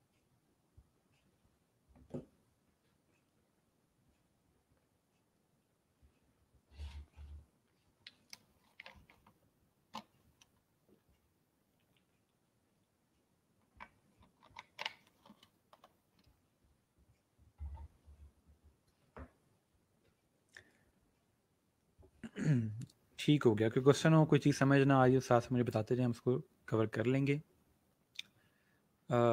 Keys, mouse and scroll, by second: 25.6 click.